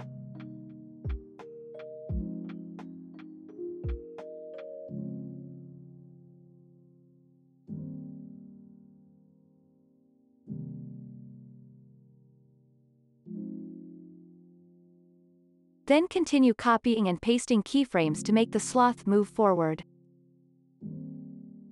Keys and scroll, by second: 0.0 0, 0.2 Return, 2.7 ctrl+a, 3.6 alt+], 3.9 ctrl+s, 5.2 End, 6.0 alt+], 6.5 ctrl+s, 8.2 ctrl+a, 9.0 alt+], 9.2 ctrl+s, 11.1 ctrl+s, 15.8 =, 20.8 ctrl+c, 21.0 ctrl+v, 21.3 ctrl+s.